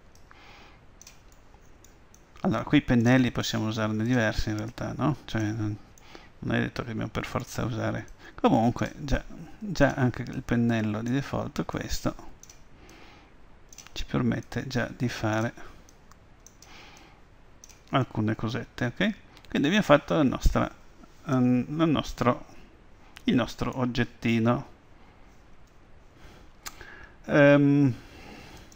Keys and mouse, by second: 2.2 middle click, 2.3-6.5 drag, 6.0-8.2 middle drag, 8.2-18.9 drag, 18.9-20.1 middle drag, 22.2-26.2 middle drag.